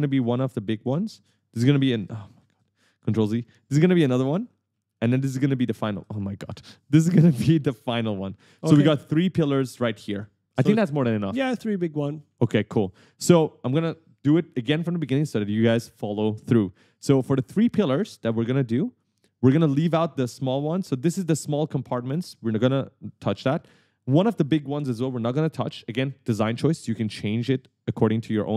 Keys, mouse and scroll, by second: 0.5 right click, 0.6 a, 1.5 shift+click, 3.6 shift+click, 4.4 right click, 4.4 a, 4.9 a, 5.6 shift+click, 7.2 shift+click, 7.9 right click, 8.0-10.1 typing, 16.3 click, 16.8 right click, 18.0 d, 18.0 right click, 20.7 d, 22.3 right click, 23.1 a, 23.4 a.